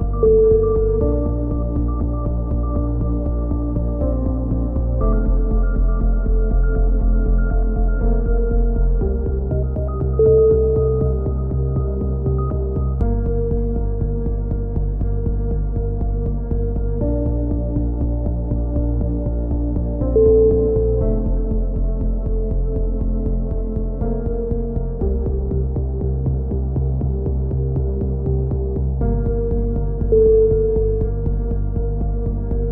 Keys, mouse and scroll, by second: 4.4 middle click, 4.7 Tab, 5.1 click, 6.1 click, 6.6-8.2 middle drag, 8.2 click, 8.8 KP_1, 9.2 z, 11.4 b, 12.5 click, 15.3 a, 15.4 z, 15.6-16.6 drag, 17.6-20.3 middle drag, 20.3 click, 21.1-23.0 right drag, 23.0 s, 26.4 a, 26.8-27.8 drag, 28.7 ctrl+z, 29.0 ctrl+z, 29.5 click, 30.0 s, 31.9 KP_3, 32.4 z, 32.6 a.